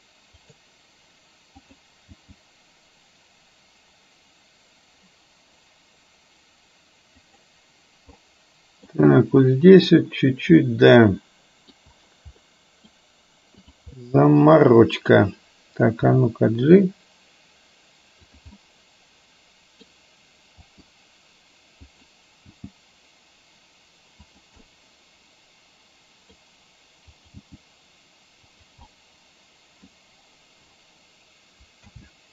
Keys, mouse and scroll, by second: 0.5 g, 2.1 g, 8.3-9.0 middle drag, 10.6-11.8 middle drag, 12.5 middle click, 13.8 click, 14.0-15.1 middle drag, 16.1 g, 18.6-19.9 middle drag, 20.8 r, 22.5 g, 24.6-26.4 middle drag, 27.1 click, 27.6 g, 29.0-30.0 middle drag, 31.9 a.